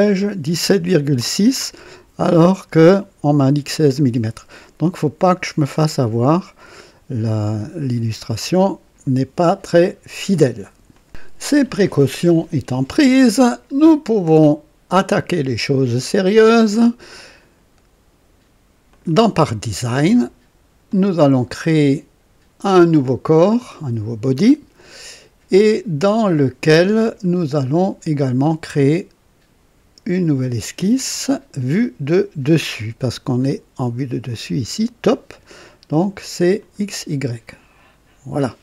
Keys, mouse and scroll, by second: 3.9-4.4 scroll down 2, 10.9 click, 14.9 click, 18.8 click, 20.8 click, 23.5 click, 30.9 click, 36.5 click, 37.4 click.